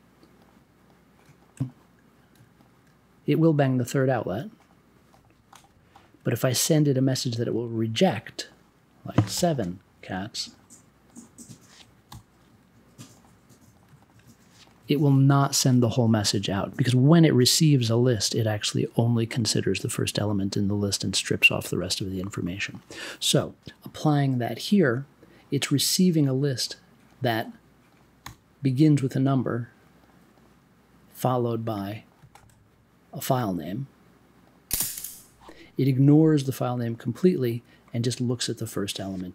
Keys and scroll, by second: 9.3 7, 12.0 m, 28.2 m.